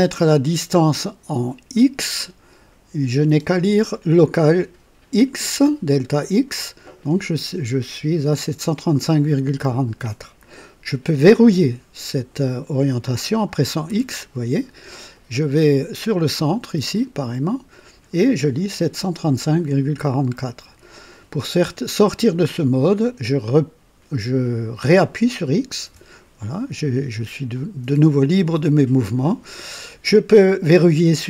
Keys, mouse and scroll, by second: 13.8 x, 13.9 x, 25.8 x.